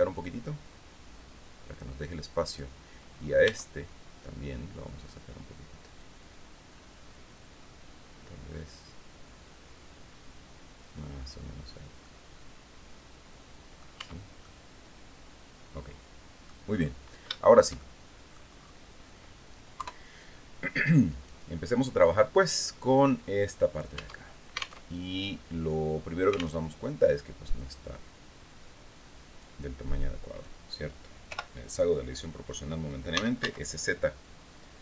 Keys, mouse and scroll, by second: 1.9 right click, 2.6-3.0 scroll up 1, 2.9 Tab, 5.5 click, 6.2-6.8 scroll up 1, 7.1-7.4 scroll up 1, 7.5-8.2 scroll down 2, 10.6-11.2 scroll down 4, 11.5-13.5 drag, 13.5 Tab, 13.9-16.1 drag, 16.8-18.0 shift+drag, 19.3 KP_3, 20.6 right click, 22.4-23.5 drag, 23.5 Tab, 24.3 alt+Tab, 26.1 alt+Tab, 28.9-30.1 drag, 30.8 o, 32.4-33.4 typing, 34.4 click.